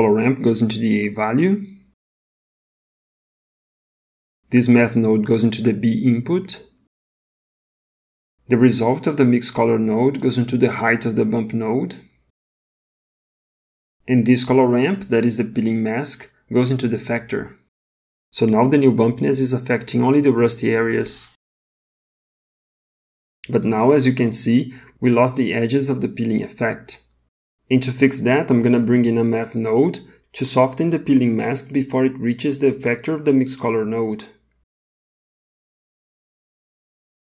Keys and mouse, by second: 1.7 click, 2.1-3.6 drag, 5.1 click, 5.4-6.7 drag, 9.4-11.0 drag, 13.4 middle click, 15.5 click, 15.8-18.1 drag, 24.4 middle click, 29.5 middle click, 30.1-30.8 drag, 31.0 g, 34.6 shift+a.